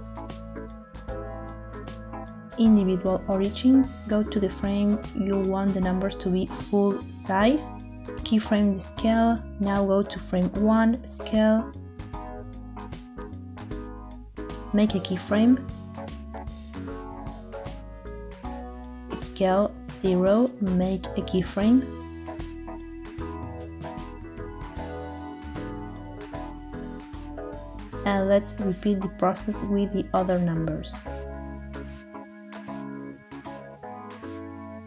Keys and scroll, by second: 12.2 s, 18.5 s, 20.1 0, 21.7 i, 23.8 space, 26.8 space.